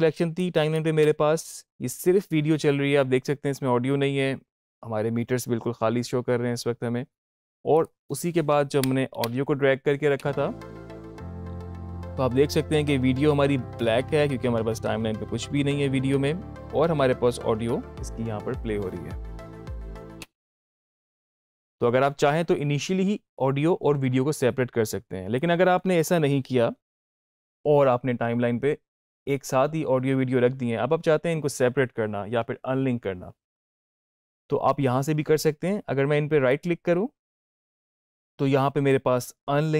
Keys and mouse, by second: 0.8 space, 7.4 space, 7.6 click, 8.6 Down, 10.0 space, 20.0 space, 25.2 click, 36.4 right click.